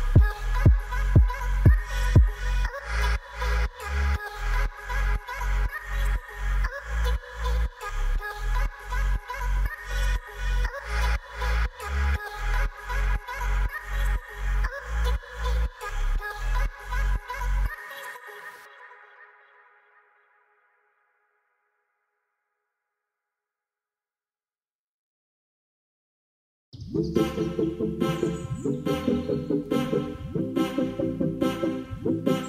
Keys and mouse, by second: 0.2 click, 0.4 ctrl+a, 0.5 ctrl+a, 1.1 click, 1.8 ctrl+a, 2.0 ctrl+a, 2.5 click, 3.2 click, 3.4 ctrl+a, 3.6 ctrl+a, 4.1 click, 5.3-6.9 drag, 7.8 shift+click, 11.7 ctrl+l, 13.3 click, 14.7-15.0 middle drag, 15.6 alt+h, 15.9-16.4 middle drag, 16.9 ctrl+s, 16.9-17.2 middle drag, 17.7 KP_0, 18.4 click, 19.1-20.0 middle drag, 20.3 middle click, 22.2 alt+r, 23.2 g, 23.4 z, 24.2 click, 26.6-30.7 typing, 27.6 Return, 29.5 Return, 32.1 click.